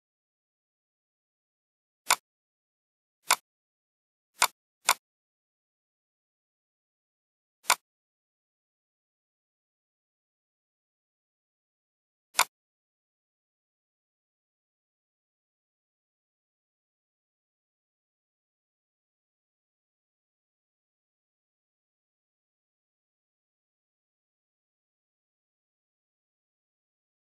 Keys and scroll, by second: 9.4 Delete.